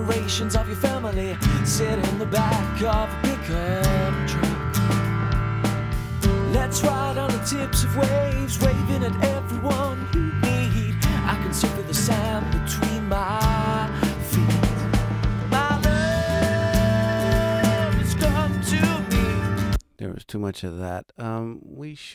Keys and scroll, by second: 19.4 space.